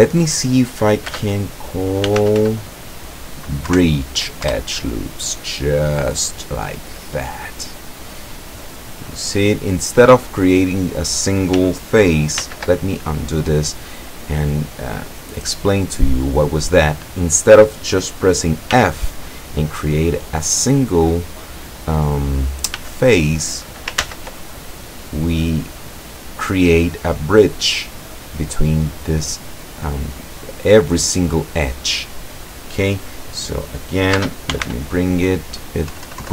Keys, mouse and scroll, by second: 1.1 space, 2.1 b, 2.3 r, 2.4 i, 3.7 Down, 4.5 Return, 7.5-10.5 middle drag, 12.4 ctrl+z, 13.8-14.8 drag, 14.9-16.7 drag, 18.8 f, 19.5 click, 22.8 f, 24.1 ctrl+z, 24.7 ctrl+click, 25.9 click, 27.2-28.3 drag, 32.0 click, 34.2 space, 34.6 b, 34.7 r, 36.0 Down.